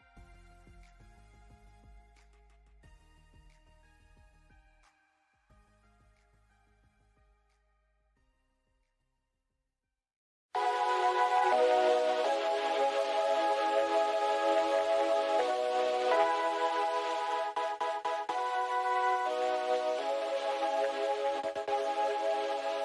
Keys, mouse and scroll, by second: 0.8 ctrl+z, 2.0 click, 2.5 alt+scroll up 1, 2.6-5.4 drag, 5.7 click, 6.3 alt+scroll down 1, 7.0 click, 7.3 alt+scroll down 1, 7.5 click, 8.2 alt+scroll up 1, 8.4 click, 8.4 space, 8.5 space, 8.6 ctrl+z, 9.5 click, 9.9 alt+scroll up 1, 10.2-12.7 drag, 14.6 click, 18.0 click, 18.3 scroll down 1, 19.1 alt+scroll up 1, 19.3 click, 19.6 click, 20.3-21.5 alt+scroll up 4, 21.0 ctrl+s, 21.8 click.